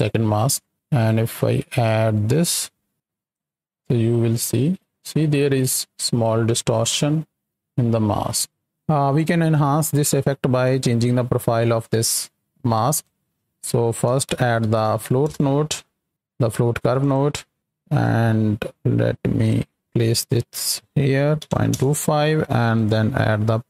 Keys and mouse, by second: 0.7 click, 1.4 right drag, 1.9 right click, 2.9 click, 4.4-8.7 shift+drag, 10.6 click, 11.7-13.0 drag, 17.0 click, 18.0-19.5 drag, 20.5-21.8 drag, 22.7-23.6 drag.